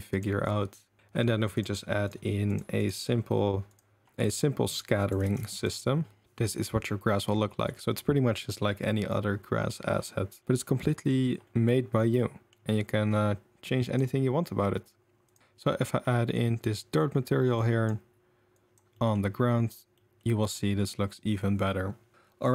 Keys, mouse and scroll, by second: 0.1 click, 2.1 click, 2.8 click, 3.7 click, 5.0 click, 5.3 ctrl+a, 10.4 middle drag, 10.9 middle drag, 11.4 middle drag, 12.2 middle click, 12.2 click, 12.3 middle drag, 13.7 click, 15.3 click, 17.6-18.7 drag, 18.7 middle click, 19.1 middle click, 19.9 middle click, 20.2 middle click, 20.4 middle click, 20.5 click, 20.5 middle click.